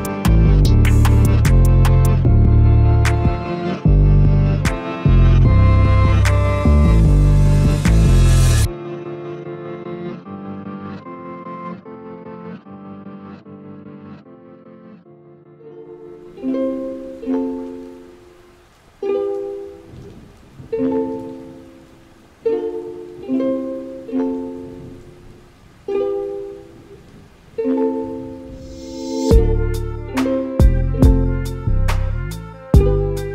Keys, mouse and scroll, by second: 1.3-4.6 drag, 4.6 Tab, 5.3 Tab, 6.1 ctrl+3, 6.6 click, 7.3 ctrl+3, 7.9-9.0 middle drag, 9.0 click, 9.6 Tab, 10.3-10.6 scroll up 1, 10.6-12.0 middle drag, 12.0 3, 12.1 click, 12.6 g, 14.6 middle click, 15.2-15.6 scroll up 1, 15.6 g, 16.3 a, 16.5 a, 17.0 middle click, 17.6 click, 18.2 g, 20.9 scroll down 1, 21.2-22.9 middle drag, 22.9 click, 23.7 click, 24.1 g, 26.0 click, 26.7 g, 28.5 a, 28.6 a, 29.1 middle click, 29.9 2, 30.1 click, 30.2 click, 31.1 shift+click, 31.2 shift+click, 31.7 ctrl+x, 32.1 middle click, 32.8 click, 33.0 click.